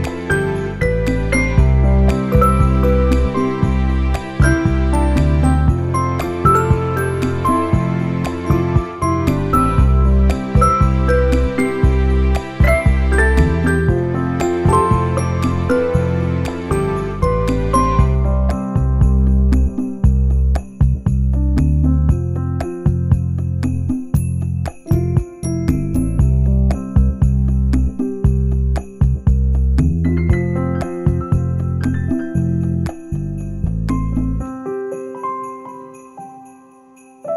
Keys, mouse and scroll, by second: 1.1 s, 2.3 g, 4.1 s, 6.6 g, 8.4 Tab, 8.9 scroll down 1, 9.2 shift+middle click, 9.5 middle click, 10.3 click, 10.5 shift+middle click, 11.6 click, 12.7 Tab, 13.4 u, 16.4 middle click, 17.1 shift+middle click, 17.8 r, 26.8 shift+middle click, 26.8 scroll down 2, 27.0 middle click, 28.0 shift+middle click, 28.3 click, 28.7 Tab, 29.1 middle click, 29.7 click, 30.0 middle click, 31.0 alt+click, 32.3 u, 34.6 s, 35.5 click, 36.5 click, 37.0 middle click.